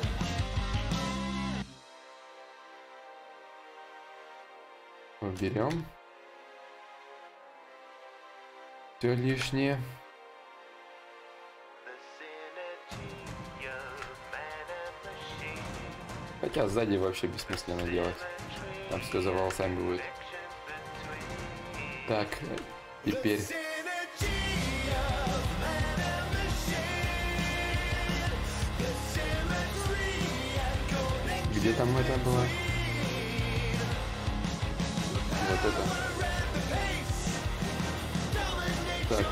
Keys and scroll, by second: 16.2 ctrl+z, 16.2 y.